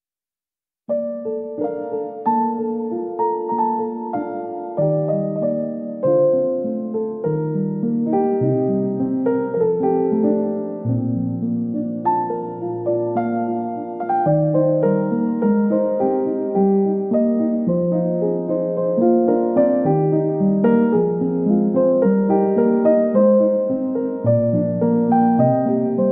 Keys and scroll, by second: 7.1-7.8 typing, 19.3 ctrl+d, 24.5 \.